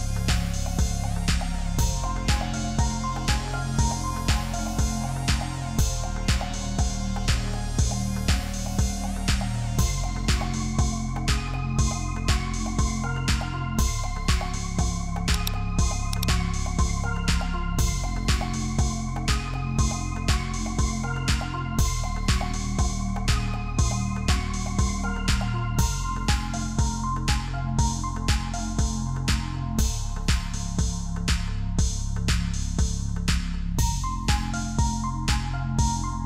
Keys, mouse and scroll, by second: 5.4 double click, 8.7 Return, 9.7 right click, 13.2 ctrl+t, 17.8 Return, 19.2 ctrl+click, 20.6 ctrl+z, 21.6 ctrl+z, 22.4 ctrl+click, 24.0 ctrl+g, 25.0 double click, 26.2-32.1 typing, 34.6-35.5 typing, 36.1 Return.